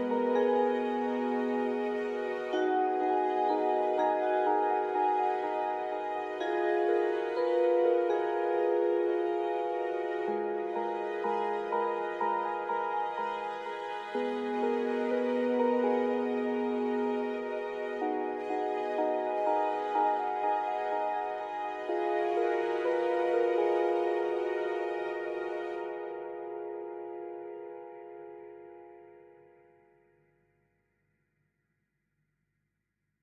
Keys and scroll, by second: 0.4 alt+Tab, 4.1 typing, 5.8 typing, 8.4 typing, 9.7 typing, 12.9-13.6 typing, 15.5-16.6 typing, 17.7-20.7 typing, 22.2 typing, 23.4-25.0 typing, 26.3 typing, 28.6-33.2 typing.